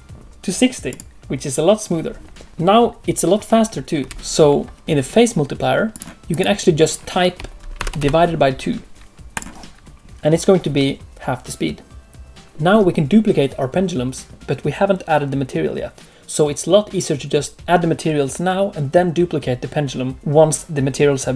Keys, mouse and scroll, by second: 2.5 space, 3.9 space, 4.7 click, 4.7 space, 5.9 click, 12.5 shift+middle click.